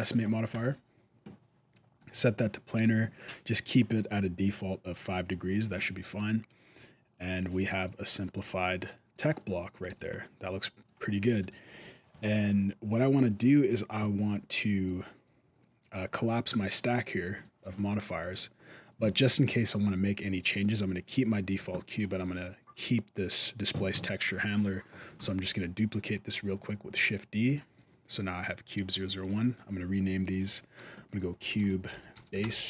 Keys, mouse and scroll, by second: 2.3 click, 3.6 middle click, 4.7 middle click, 5.6 middle click, 7.6 middle click, 9.2 middle click, 9.7 alt+a, 10.0 middle click, 11.2 right click, 11.8 middle click, 13.5 middle click, 15.0 middle click, 16.4 middle click, 17.2 shift+middle click, 17.6 middle click, 21.3 middle click, 21.5 shift+middle click, 24.0-24.4 scroll up 1, 24.4 middle click, 25.5 shift+d, 26.6 shift+middle click, 26.9 scroll down 1, 27.3 shift+middle click, 29.0 click, 29.1 click.